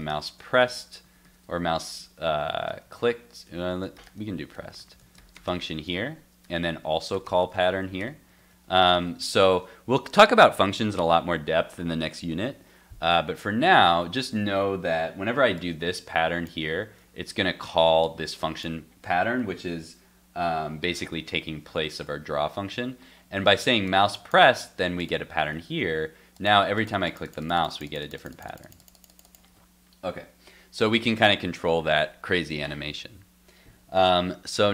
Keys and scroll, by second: 5.5 super+s, 8.9 super+s, 21.7 super+s, 25.4 super+Tab, 25.8 super+r.